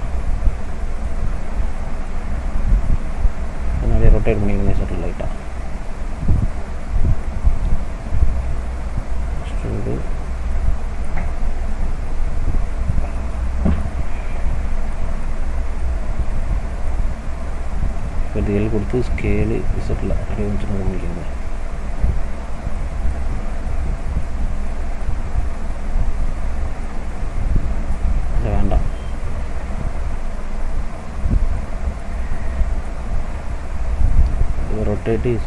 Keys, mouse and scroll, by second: 1.4 middle click, 3.9 r, 7.3 ctrl+z, 8.5 e, 10.6 middle click, 11.8 click, 13.2 middle click, 14.4 middle click, 15.9-16.3 scroll down 1, 16.5 middle click, 18.3 l, 19.4 s, 22.8 middle click, 23.3 click, 23.7 middle click, 24.7 middle click, 25.4 scroll up 1, 25.7 middle click, 28.0 ctrl+z, 28.2 ctrl+z, 28.5 ctrl+z, 28.7 ctrl+z, 28.9 ctrl+z, 29.1 ctrl+z, 29.4 ctrl+z, 29.8 ctrl+z, 30.3 ctrl+z, 31.6 middle click, 32.9 e.